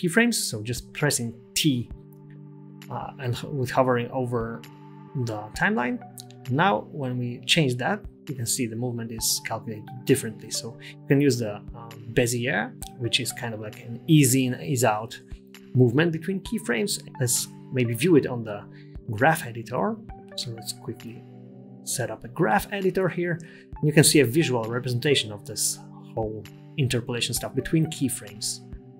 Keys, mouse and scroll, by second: 0.3 space, 2.0 t, 5.5 space, 9.4 space, 9.9 t, 12.1 click, 12.8 click, 14.5 t, 16.0 space, 19.8 right click, 22.1 click, 25.6-27.1 scroll up 9, 28.3-28.9 scroll down 2.